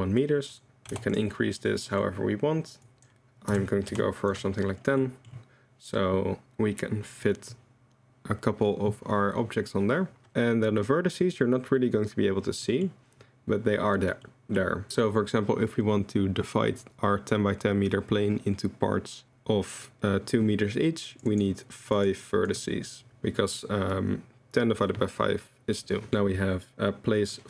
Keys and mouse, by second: 0.4 click, 1.9 click, 2.9-4.8 drag, 5.0 middle click, 12.6 middle drag, 14.2-14.6 middle drag, 21.1 click, 21.4 click, 21.8 click, 21.9 click, 22.5 click, 26.1 click.